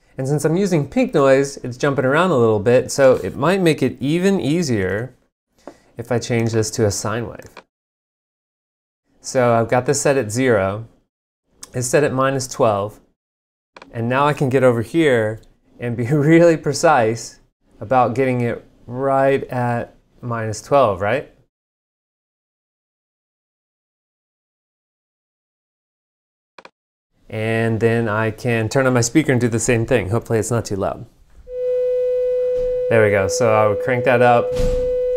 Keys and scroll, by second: 5.0 alt+n.